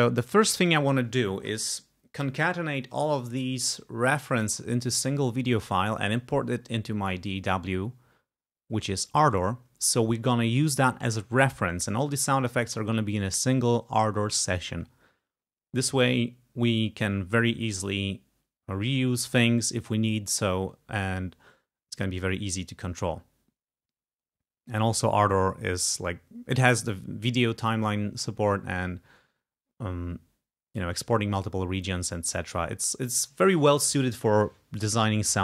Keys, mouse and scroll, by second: 3.8-4.3 scroll down 2, 4.4 scroll up 2, 22.0 scroll up 2.